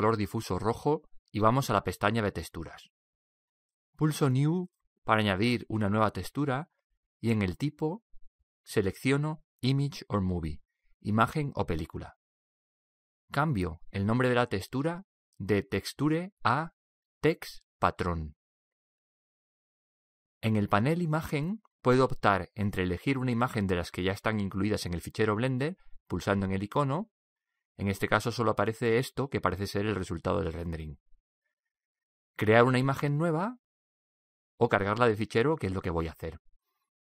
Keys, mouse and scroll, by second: 0.0-9.9 drag, 13.3-16.5 drag, 21.2-22.9 drag, 25.1-27.0 drag, 32.8-34.8 drag.